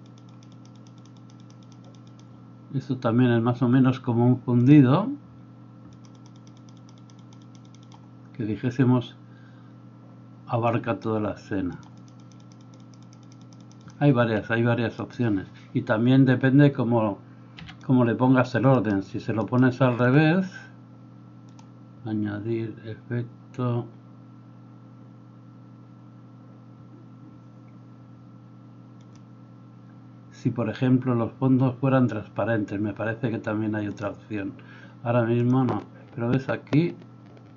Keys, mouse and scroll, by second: 4.7-6.0 middle drag, 6.0-37.5 drag, 14.1 Escape, 15.0 middle click, 15.0 right click, 17.6 x, 18.7 middle click, 18.7 right click, 19.4 middle click, 19.4 right click.